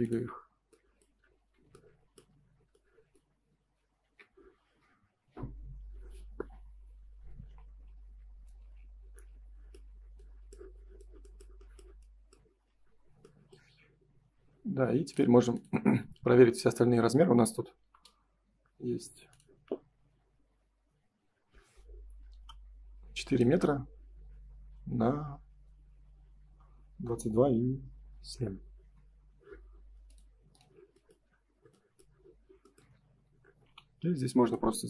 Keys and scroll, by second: 0.3 space, 1.4 Escape, 4.0 ctrl+s, 7.0 F3, 9.8 F4, 21.6 Escape, 28.1 Escape, 28.7 space.